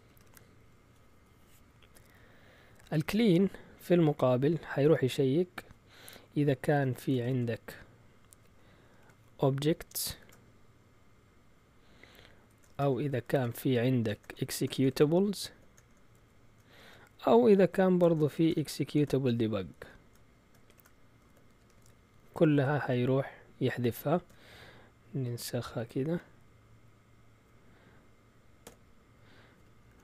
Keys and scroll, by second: 0.0-0.7 typing, 2.7 Down, 2.9 Down, 4.8 space, 6.8-10.1 typing, 12.1-22.3 typing, 16.1 shift+Tab, 23.7-25.9 typing, 28.4-30.0 typing, 29.8 End.